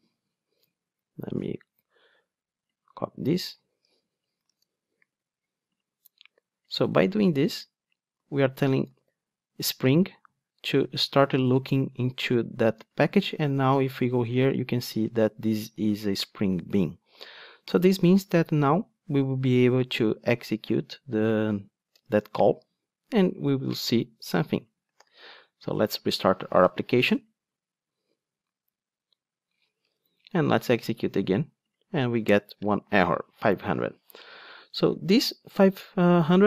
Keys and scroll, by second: 3.6 super+c, 5.2 ctrl+Tab, 9.1 super+v, 25.1 super+r.